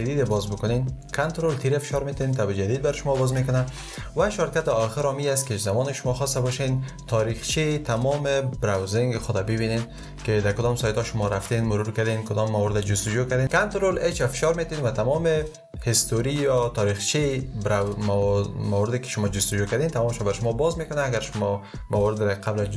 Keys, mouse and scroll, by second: 1.2 ctrl+t, 13.9 ctrl+h.